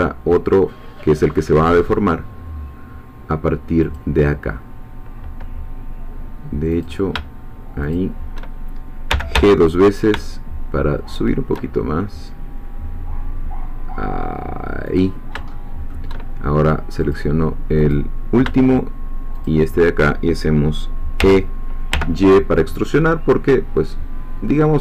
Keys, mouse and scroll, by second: 3.9-7.0 drag, 7.9 shift+click, 9.1 g, 14.9 click, 15.5 shift+middle click, 16.2-16.6 shift+scroll down 1, 17.1 click, 19.5 shift+click, 21.2 e, 21.9 y.